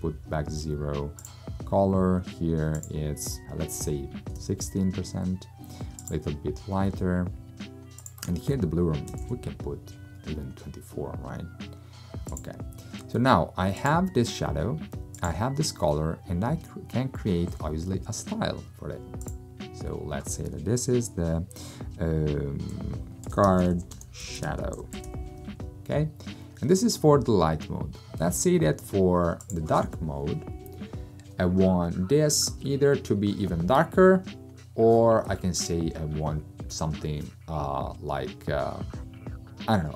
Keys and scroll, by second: 3.5-4.4 typing, 8.9-9.8 typing, 23.0-25.6 typing.